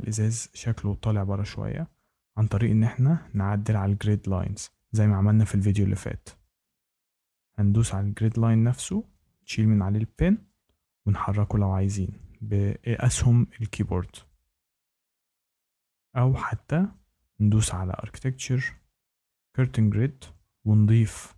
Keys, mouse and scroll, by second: 0.0 scroll down 1, 0.7-1.9 scroll, 1.0 middle click, 2.4 scroll, 3.3 shift+right click, 3.3-3.7 scroll, 3.6 middle click, 6.3 middle click, 6.4 scroll, 7.2 Tab, 7.6 Tab, 8.2 click, 9.7 click, 10.9 BackSpace, 11.4 BackSpace, 12.0 BackSpace, 13.7 Left, 14.6 Left, 18.0 click, 19.5 click.